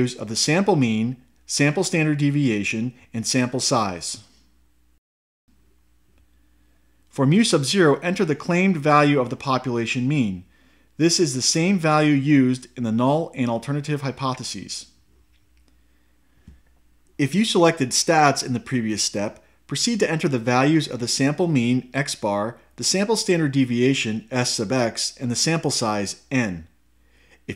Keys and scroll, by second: 4.7 Left, 6.9 Return, 9.6 Down, 13.3 1, 15.6 Return.